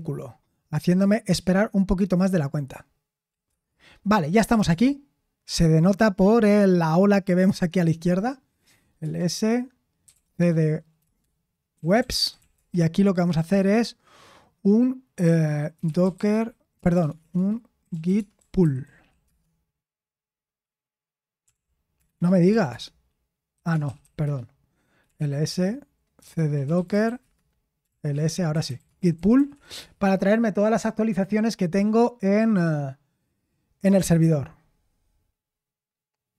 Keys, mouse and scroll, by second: 3.4 Return, 4.4-5.1 typing, 11.9-12.8 typing, 17.8-18.9 typing, 19.2 Return, 21.1-31.6 typing.